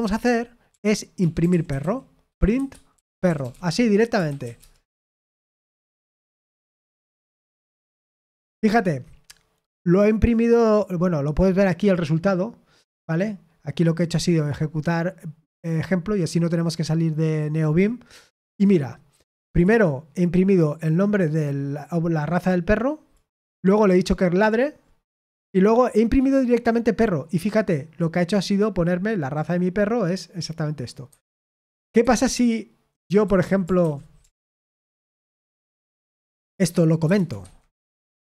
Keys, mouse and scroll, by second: 0.0-4.7 typing, 5.9 F6, 7.2 F5, 31.0 Escape, 31.0 click, 31.9-35.9 typing, 37.3 shift+#, 37.6 space, 37.8 Escape.